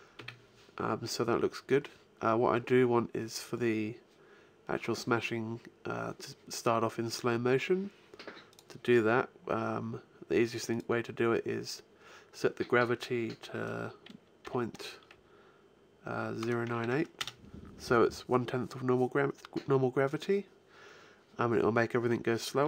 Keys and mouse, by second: 8.3-10.2 drag, 10.5-12.3 drag, 22.6 p.